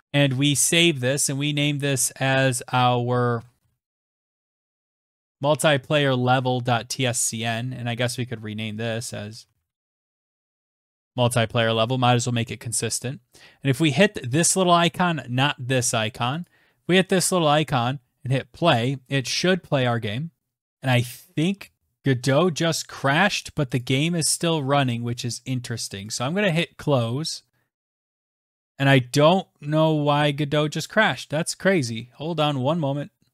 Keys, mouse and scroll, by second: 0.0 ctrl+s, 2.7-5.2 typing, 7.0 click, 7.1 click, 8.4-10.6 typing, 11.2 ctrl+s, 13.7-14.4 typing, 16.0 click, 17.2 click, 25.7 click, 27.5 right click, 28.0 click, 28.3 scroll down 1, 30.5 click, 32.1 click, 33.0-33.3 scroll down 6.